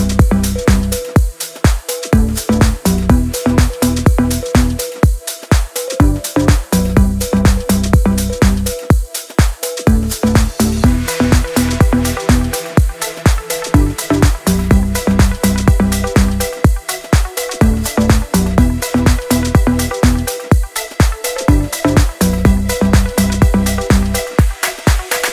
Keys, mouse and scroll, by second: 12.7 click, 15.9 click, 17.9 scroll down 1, 18.1-19.1 scroll up 1, 19.3-19.9 alt+scroll down 1, 19.9-20.8 alt+scroll up 2, 22.0-22.9 drag.